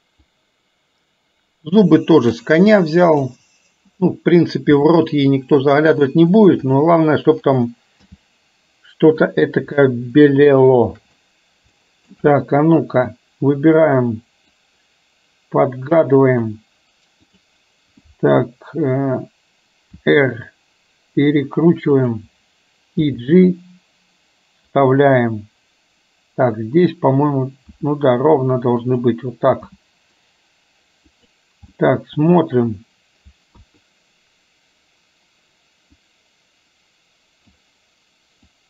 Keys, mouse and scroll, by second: 0.2 click, 0.5-2.5 drag, 2.8-3.3 drag, 8.1 g, 10.6 shift+middle click, 11.8 shift+middle click, 14.6-16.6 drag, 17.2 click, 20.1 r, 27.8 r, 29.7 g, 31.8-32.3 middle drag, 33.6 KP_1, 36.0-37.6 drag.